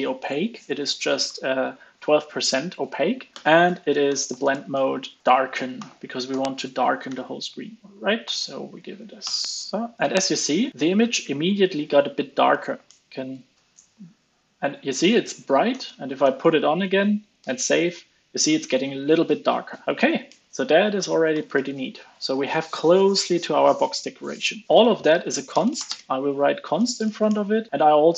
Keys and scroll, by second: 9.2 alt+super+l, 9.4 super+s, 12.2 alt+Up, 12.4 alt+Up, 12.8 alt+Up, 13.7 super+s, 15.6 super+z, 15.8 super+z, 16.2 super+z, 21.3 alt+super+l, 21.5 super+s, 24.6 super+b, 24.6 alt+super+Left, 26.7 alt+Up, 27.2 alt+Up.